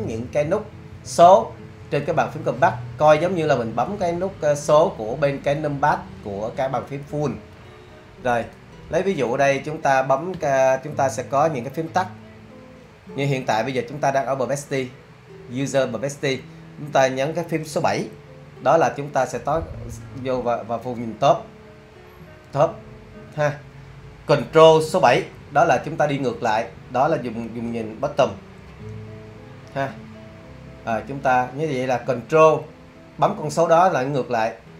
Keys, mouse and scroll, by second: 20.4 7, 28.7 super+7, 30.3 super+7.